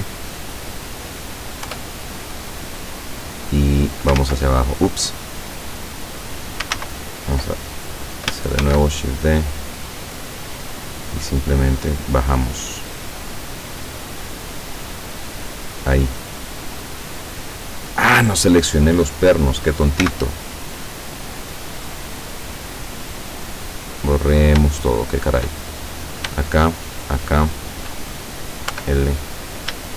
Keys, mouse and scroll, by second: 1.7 Return, 2.5-4.3 drag, 4.2 ctrl+z, 6.8 ctrl+z, 8.7 shift+d, 15.9 click, 17.7-18.0 scroll up 2, 20.1 x, 23.5 click, 24.8 shift+middle click, 25.9 shift+right click, 26.8 shift+right click, 28.8 l, 29.8 shift+right click.